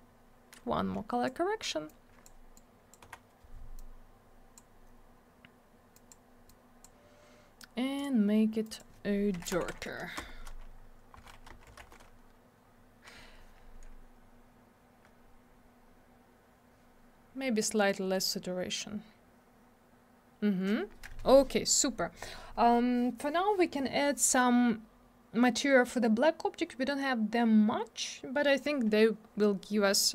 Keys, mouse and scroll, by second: 1.9 click, 2.5 click, 3.0 Delete, 3.8 click, 5.9 click, 6.1 click, 6.5 click, 8.0 click, 8.0 click, 8.6 click, 8.8 click, 9.1-10.1 typing, 10.2 Return, 11.1 Right, 11.5 BackSpace, 11.7 9, 11.8 Return, 17.9 click, 17.9 click.